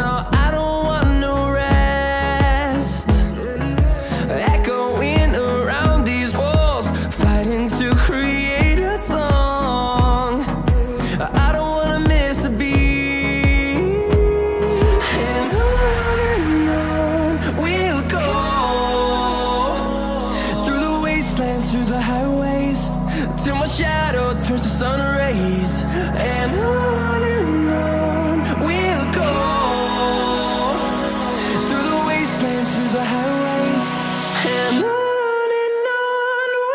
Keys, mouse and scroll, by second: 3.2 scroll down 1, 5.7-6.6 scroll up 1, 8.2-14.3 drag, 14.8 scroll down 1, 15.9 click, 18.0 right click, 18.1 right click, 18.9 click, 21.0 F10, 22.8 click, 23.9-31.5 drag, 31.5 right click, 32.3 click, 34.9 typing, 36.4-36.7 drag, 36.4 typing.